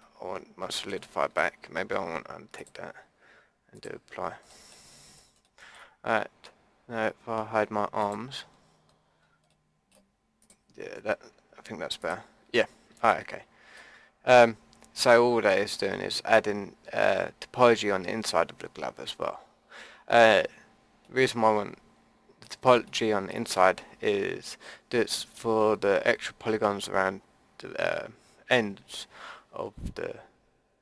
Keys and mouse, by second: 0.3-1.2 middle drag, 2.6-3.8 drag, 4.5-8.4 middle drag, 8.4 drag, 8.5-8.9 middle drag, 8.9-9.2 drag, 9.2-10.4 middle drag, 10.4-13.3 drag, 10.8 Tab, 13.4 click, 13.7 middle click, 15.1-20.2 drag, 20.2 middle click, 23.3 middle click, 29.1-30.8 middle drag.